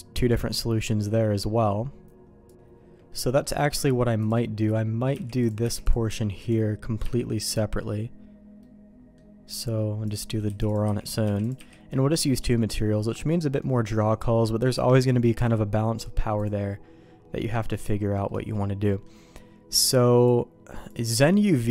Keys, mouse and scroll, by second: 3.1 middle click, 4.2 click, 4.5 middle click, 5.1 h, 5.4 click, 5.6 h, 5.8 click, 6.0 h, 6.4 click, 7.0 h, 7.4 middle click, 8.6 middle click, 10.0 click, 10.4 h, 10.6 click, 10.8 h, 11.0 click, 11.2 h, 11.4 click, 11.9 middle click, 11.9 h, 13.2 middle click, 16.5-18.1 drag, 18.2 middle click, 18.8 middle click, 20.3-21.7 drag.